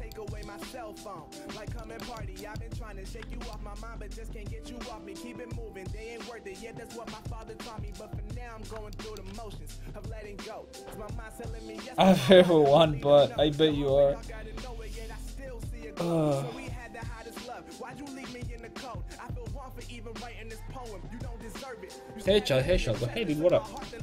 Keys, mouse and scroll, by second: 3.3 Tab, 4.8 a.